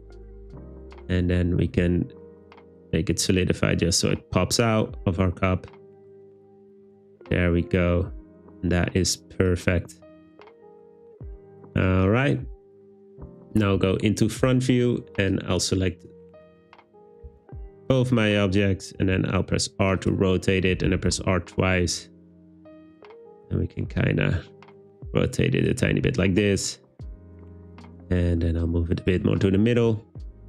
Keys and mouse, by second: 0.0 click, 2.3-6.9 shift+drag, 17.3 a, 19.0 r, 20.9 r, 21.1 r, 25.7 click, 26.0 g, 29.1 click.